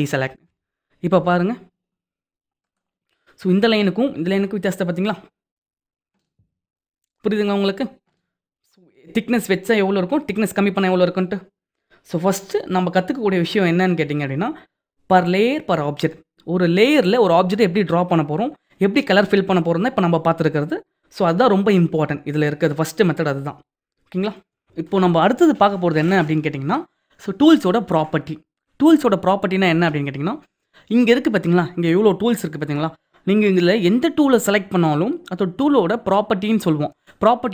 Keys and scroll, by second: 0.2 ctrl+d.